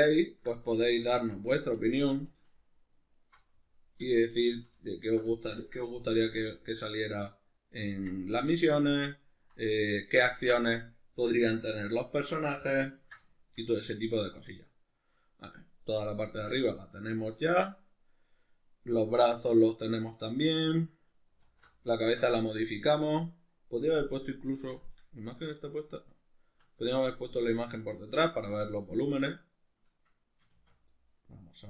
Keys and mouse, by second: 0.0 ctrl+middle click, 1.0 alt+shift+right click, 1.7 shift+middle click, 2.5 alt+shift+right click, 3.2 alt+shift+right click, 3.4 middle click, 5.0 alt+shift+right click, 5.4-8.0 shift+middle drag, 6.2 ctrl+b, 8.0 click, 8.3 Tab, 8.6-31.6 middle drag, 21.4 alt+q, 30.6 shift+a.